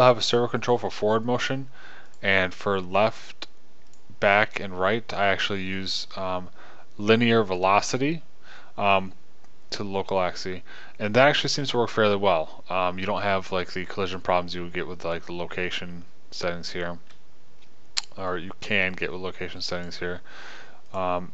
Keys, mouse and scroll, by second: 2.4 middle click, 18.7-20.9 middle drag.